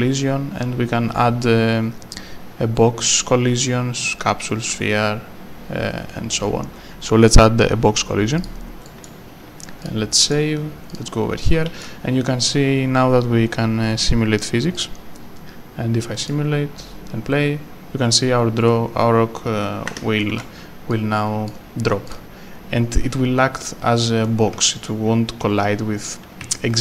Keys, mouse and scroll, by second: 8.4 click, 8.9 right click, 9.8 click, 10.2 right click, 10.3 s, 10.9 click, 11.4 right click, 14.7 click, 19.9 Escape, 20.2 right click, 20.3 s, 20.9 click, 24.2 right click.